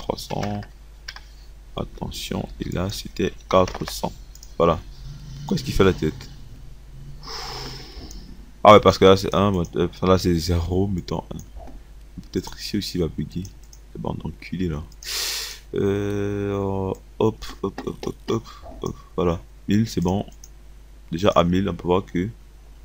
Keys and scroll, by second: 0.3 KP_3, 2.0 BackSpace, 3.4 KP_4, 3.8 KP_0, 9.5 KP_1.